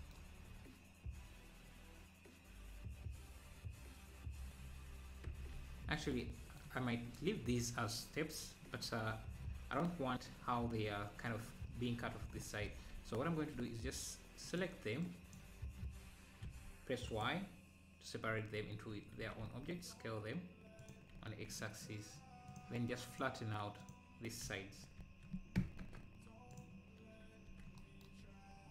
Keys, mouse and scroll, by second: 5.3 Tab, 6.6 middle click, 8.8 scroll down 2, 9.4 scroll up 4, 12.4 scroll down 4, 12.7 Tab, 14.5 click, 14.5 z, 16.5 y, 17.1-18.7 right drag, 18.7 `, 19.2 s, 21.2 `, 22.5-24.4 drag, 24.5 s.